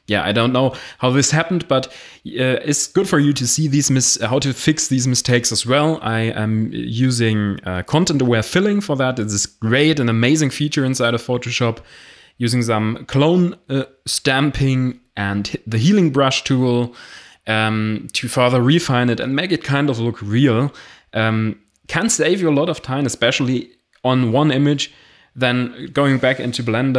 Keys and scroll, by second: 18.6 ctrl+d, 25.4 Delete.